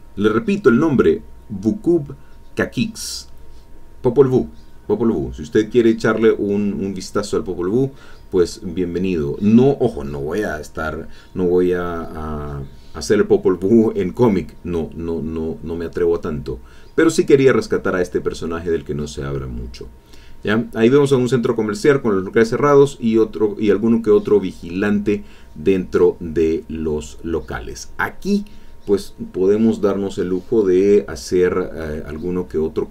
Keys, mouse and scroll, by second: 3.1 click, 4.1 click, 5.2 click, 7.3-8.4 drag, 8.6 click, 9.6 click, 10.3 click, 11.2 middle click, 11.2-11.9 scroll down 2, 11.7 ctrl+middle click, 11.9 ctrl+click, 12.6 ctrl+alt+Tab, 15.1-16.2 drag, 17.1-20.7 drag, 27.8 alt+Tab, 28.3 alt+click, 28.6 middle click, 29.8-31.7 middle drag, 32.2 middle click.